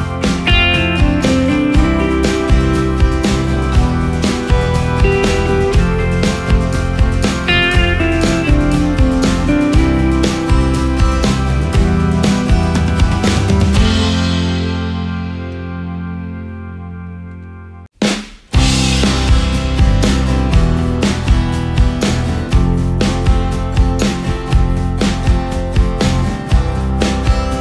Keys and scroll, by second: 1.7 ctrl+g, 2.3 ctrl+space.